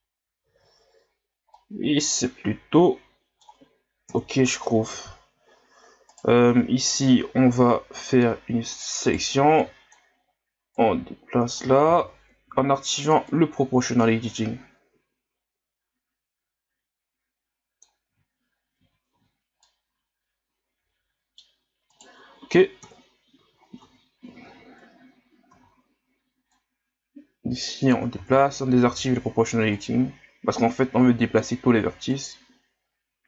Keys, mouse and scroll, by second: 0.4 z, 0.8-1.5 scroll down 1, 1.5-4.1 middle drag, 4.1 KP_1, 4.9 z, 5.4 scroll up 1, 6.1 right click, 7.9 b, 9.1 right click, 9.3 b, 10.7 click, 11.9 ctrl+z, 12.5 o, 13.3-16.3 drag, 18.8 Tab, 19.1 a, 19.6-21.9 middle drag, 21.9 right click, 22.8 KP_1, 23.5 ctrl+scroll up 5, 23.8 Tab, 24.3 a, 24.4 a, 25.5 z, 26.5-28.2 drag, 28.2 ctrl+z, 28.9 o, 29.7-33.2 drag.